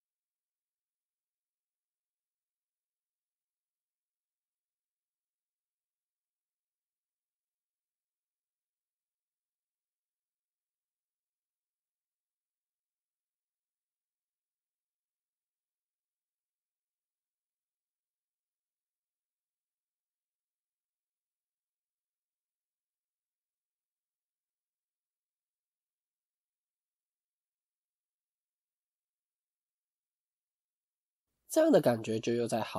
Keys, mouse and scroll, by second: 0.9-1.6 scroll up 1, 10.5-10.9 scroll down 1, 28.1-29.1 scroll up 4, 29.1 scroll down 1, 30.1 shift+middle click.